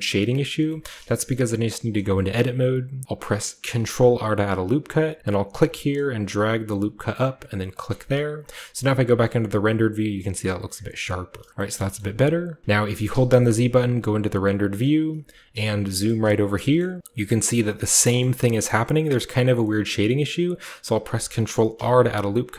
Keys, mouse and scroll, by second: 0.4-1.5 scroll down 1, 0.8-2.6 shift+middle drag, 1.5 shift+scroll down 1, 1.9 Tab, 3.7 ctrl+r, 5.4-7.5 drag, 7.6-10.4 drag, 10.4-11.4 scroll down 1, 11.4-11.9 shift+scroll down 1, 11.7 shift+middle click, 11.9-13.5 shift+middle drag, 11.9-13.5 shift+scroll up 1, 12.0 a, 12.6 ctrl+z, 15.2 typing, 15.5-16.6 shift+middle drag, 16.1-19.5 shift+scroll up 1, 16.7 shift+middle click, 17.0 ctrl+w, 18.2-19.5 shift+middle drag, 19.8-21.7 middle drag, 21.7 ctrl+r.